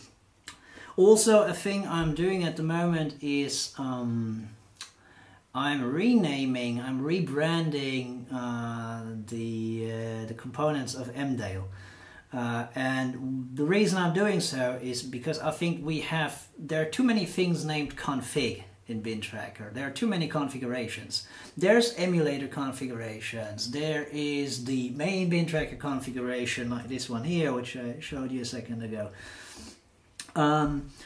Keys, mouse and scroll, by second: 29.2 super+4.